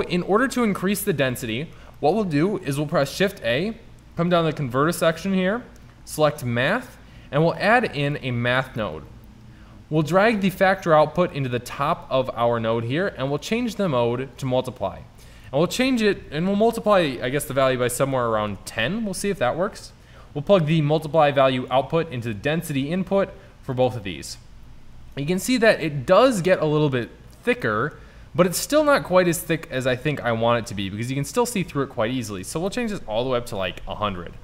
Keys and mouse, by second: 1.1-3.1 drag, 2.9 shift+a, 8.6-11.4 drag, 27.9 middle click, 28.2-28.8 middle drag, 33.5 KP_0.